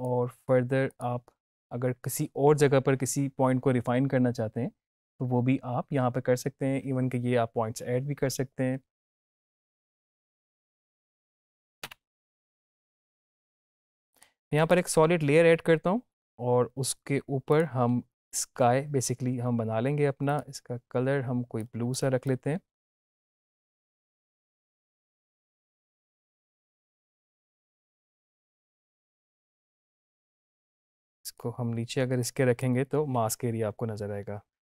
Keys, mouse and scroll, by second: 14.1 click, 14.5 right click, 17.4 click, 20.2-22.1 drag, 30.8-31.4 drag.